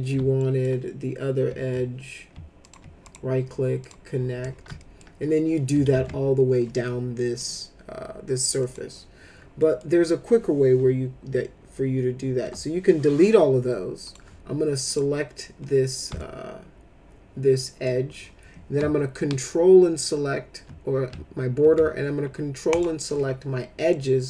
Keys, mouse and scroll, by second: 0.4 alt+middle click, 2.6 ctrl+click, 3.0 right click, 3.8 click, 4.7 alt+middle click, 5.9 ctrl+z, 7.1 middle click, 8.6 click, 9.6 middle click, 12.4 Delete, 14.0 click, 14.9 click, 16.2-17.8 alt+middle drag, 22.7 ctrl+click, 23.9 middle click.